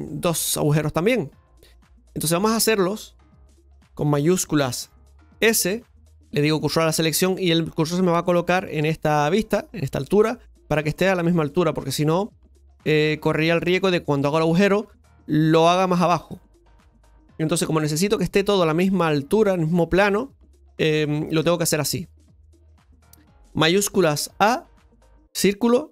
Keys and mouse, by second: 5.7 shift+s, 13.6-22.2 middle drag, 24.3 shift+a.